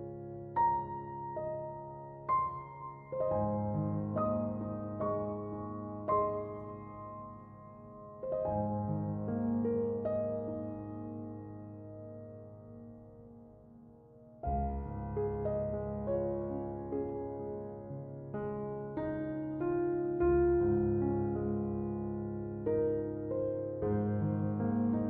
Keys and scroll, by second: 5.1 Return.